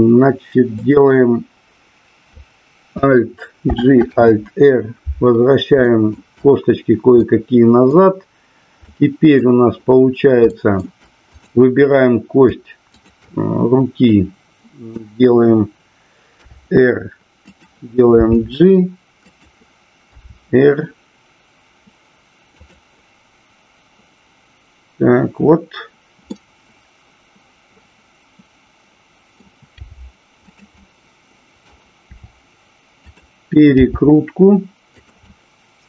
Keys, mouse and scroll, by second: 0.8-1.7 drag, 3.7 alt+g, 4.1 alt+r, 5.8 shift+middle drag, 7.1-8.0 middle drag, 8.8-9.3 middle drag, 10.4 shift+middle drag, 12.9 shift+click, 14.2-14.9 middle drag, 16.4 r, 17.5 click, 18.3 g, 19.2 click, 22.7 click, 26.3-29.4 middle drag, 30.5 click, 30.8 middle click, 33.1 click, 33.8 g, 35.1 click, 35.2-35.8 middle drag, 35.2 scroll up 1.